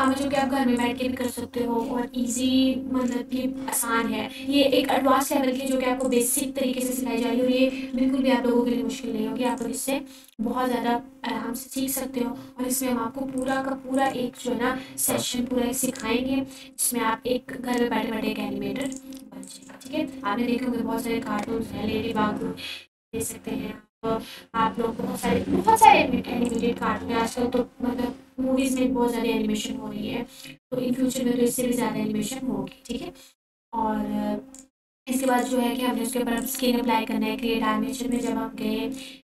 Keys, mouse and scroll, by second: 3.7 ctrl+a, 5.0 s, 5.7 x, 7.2 click, 8.0-8.7 scroll down 1, 8.7 1, 10.6 click, 20.0 click, 24.1 Tab, 26.6-27.0 drag, 28.2 Tab, 29.8 click, 33.4-35.9 drag.